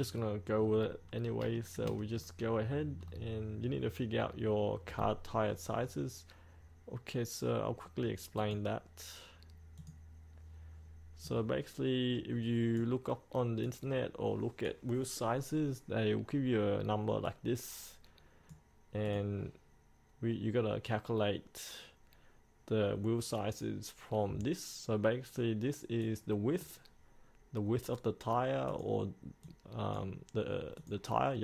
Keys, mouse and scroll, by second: 1.6 shift+middle click, 2.1 scroll down 1, 8.4-31.4 drag.